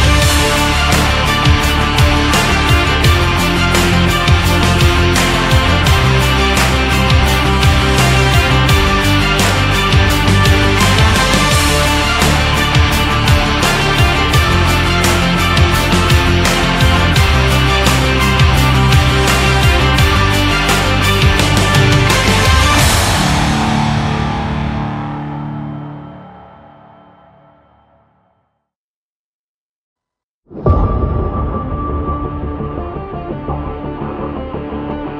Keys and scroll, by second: 27.4 ctrl+z, 33.6 ctrl+Up, 34.3 ctrl+Right, 34.6 ctrl+Down.